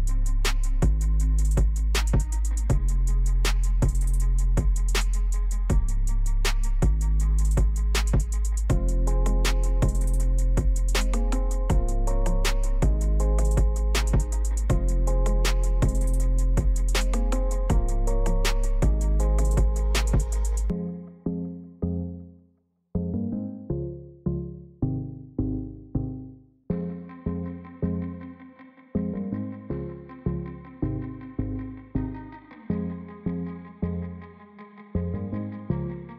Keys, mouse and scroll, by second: 8.0-26.9 drag, 33.4 shift+click, 34.8-36.1 drag.